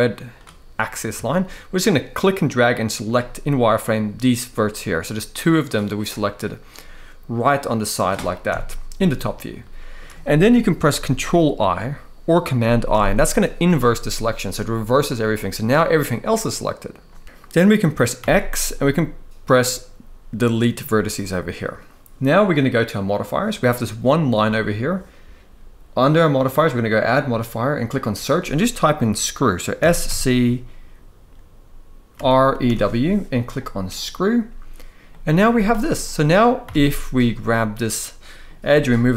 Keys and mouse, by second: 0.9 shift+middle click, 1.9 click, 4.8-5.7 middle drag, 6.4-7.7 middle drag, 8.1 KP_7, 9.3-9.7 shift+middle drag, 12.6 ctrl+i, 14.2-14.8 middle drag, 15.3-15.6 middle drag, 17.9 x, 20.9 middle click, 22.7 click, 26.5-33.7 drag, 34.8 middle click, 35.2 z, 35.7-36.3 middle drag, 37.1-38.2 middle drag, 37.1 a, 38.4 g.